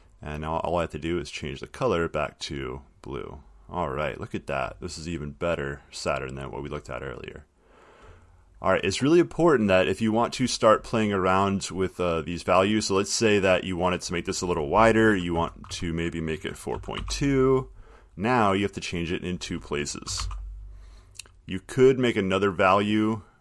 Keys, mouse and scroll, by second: 1.9 click, 3.0 click, 4.1 click, 5.6 click, 7.2 middle click, 7.3 middle click, 13.0 click, 15.3 Right, 15.5 Left, 15.9 Right, 16.7-17.7 typing, 19.3 click, 20.0-20.9 typing.